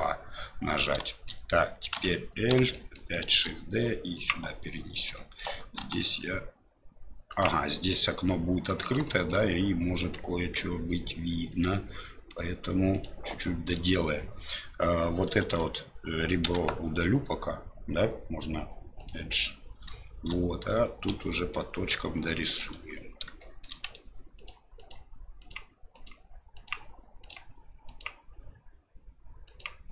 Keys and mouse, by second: 1.1 shift+middle click, 2.9 shift+middle click, 3.3 shift+d, 5.2 shift+middle click, 5.8 s, 9.1 shift+middle click, 11.5 g, 13.6 right click, 15.3 2, 15.5 right click, 16.4 x, 20.3 right click, 21.5-23.0 right drag, 21.5 typing, 23.5 shift+middle click, 24.4 ctrl+click, 24.8 ctrl+click, 25.4 ctrl+click, 25.9 ctrl+click, 26.5 ctrl+click, 28.0-29.6 ctrl+drag.